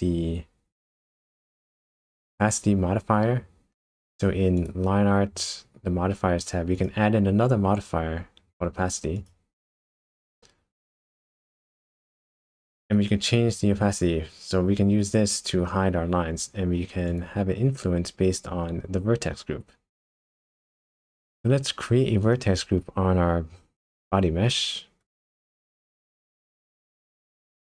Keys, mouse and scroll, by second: 1.6 click, 6.8 click, 11.0 scroll up 1, 11.2-14.0 scroll down 6, 17.1 click, 17.6-20.1 scroll down 8, 22.2 click, 25.0 Tab, 26.3 middle click, 27.3-27.6 scroll up 3.